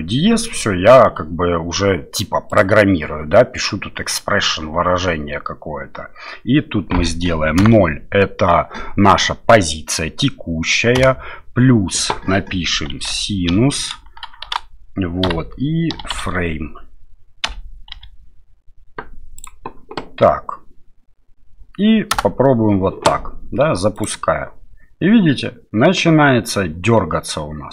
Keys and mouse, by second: 2.6-22.3 drag, 23.9 click.